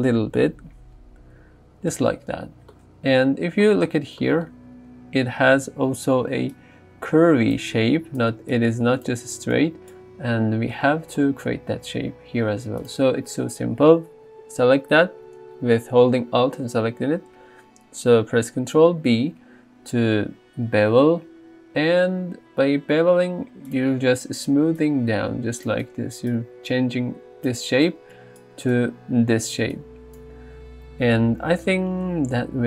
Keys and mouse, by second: 0.4 KP_3, 6.3-10.0 d, 12.8 alt+click, 19.0 ctrl+b, 23.7-24.7 drag, 24.7-30.3 d, 28.7 click.